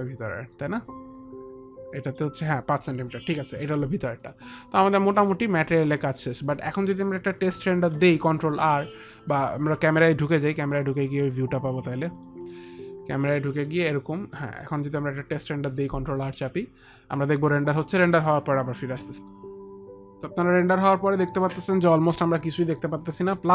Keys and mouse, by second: 0.8 click, 10.8 click, 11.8 click, 12.3 click, 13.3 click, 15.1 ctrl+r, 15.9 ctrl+r, 19.9 F9.